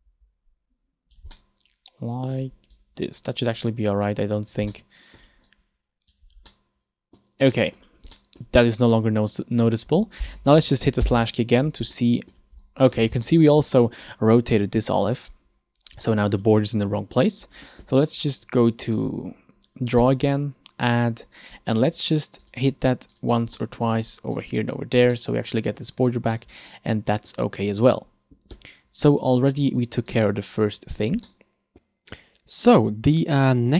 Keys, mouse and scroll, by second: 1.4 middle click, 2.9 click, 4.9 middle click, 5.6 click, 6.5 middle click, 7.7 middle click, 7.9-8.2 scroll down 3, 8.2 middle click, 8.7-9.2 scroll up 2, 9.0 middle click, 9.4-9.8 scroll down 2, 11.2 KP_Divide, 12.1 middle click, 12.7-13.0 scroll up 3, 13.0 middle click, 13.3 shift+middle click, 13.8 middle click, 16.1 middle click, 19.0 click, 21.7-22.5 scroll down 2, 22.5 click, 23.2 click, 23.7 middle click, 24.4 click, 25.3 middle click, 26.4 middle click, 29.7 click, 30.9-31.3 scroll down 3, 31.4 middle click.